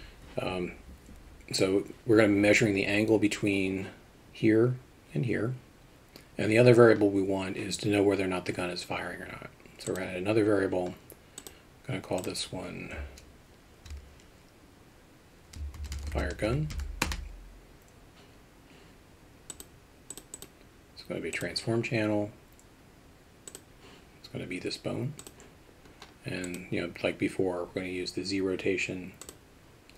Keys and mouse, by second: 9.9 click, 12.2-18.2 drag, 19.6 click, 20.4-21.5 drag, 26.6-29.4 drag.